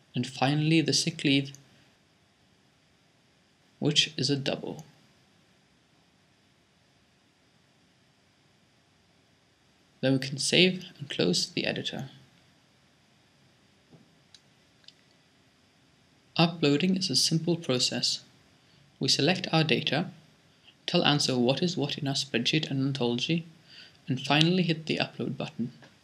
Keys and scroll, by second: 0.4-2.5 typing.